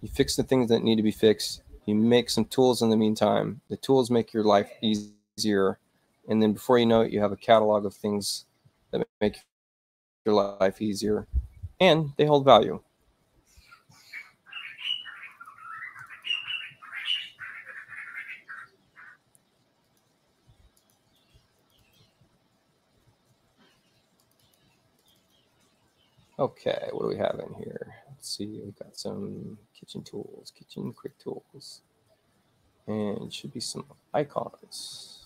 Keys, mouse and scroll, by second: 14.3 click, 15.0 click, 19.4 click, 20.4 click, 21.4 click, 21.6 click, 24.3 click, 25.1 click, 25.5-27.0 drag, 27.1 middle click, 31.0 click.